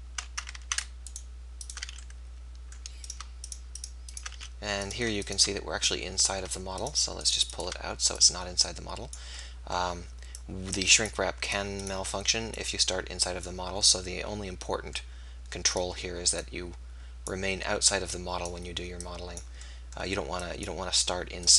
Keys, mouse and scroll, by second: 0.6 ctrl+z, 1.8 f, 3.9 click, 4.3 f, 7.6-9.4 drag, 8.2-9.5 right drag, 9.8 right click, 11.5 click, 11.5 right click, 12.3 right click, 12.5-13.5 middle drag, 13.5-14.5 drag, 15.8 right click, 16.4-17.6 middle drag, 17.6 click, 20.1-21.4 drag.